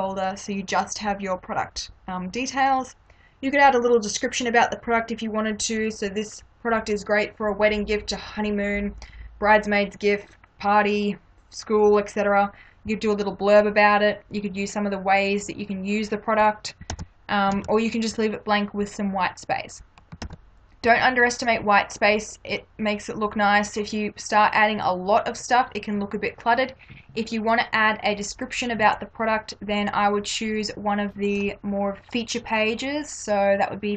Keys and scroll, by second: 16.9 ctrl+-, 20.2 ctrl+-.